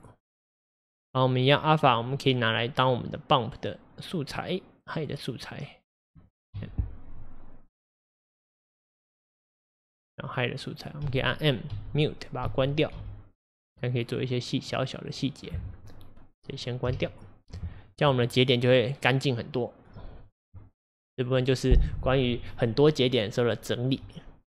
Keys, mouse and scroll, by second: 5.9 click, 6.6 m, 8.2-9.4 middle drag, 9.4-10.2 scroll up 5, 10.8 click, 11.0 m, 11.7 m, 12.4 m, 13.0 m, 14.0-14.7 scroll down 4, 14.7-16.6 middle drag, 16.6 click, 16.9 m, 19.0 click.